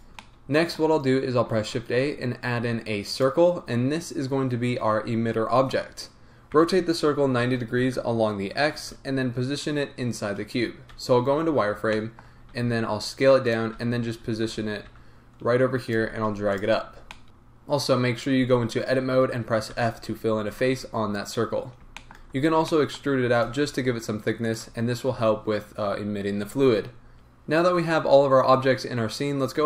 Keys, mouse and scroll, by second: 0.2 middle click, 1.6 shift+a, 6.5 r, 8.9 Return, 10.9 z, 11.6-12.0 scroll up 1, 12.0 shift+middle click, 12.6 s, 13.5 click, 13.7 g, 16.6 click, 17.2-20.5 middle drag, 17.2-18.4 scroll down 2, 18.4 Tab, 19.8 f, 20.5 Tab, 21.5-22.0 scroll up 1, 22.0 shift+middle click, 22.4 Tab, 22.7 middle click, 23.2 e, 24.5 shift+click, 25.0 Tab, 27.1 middle click.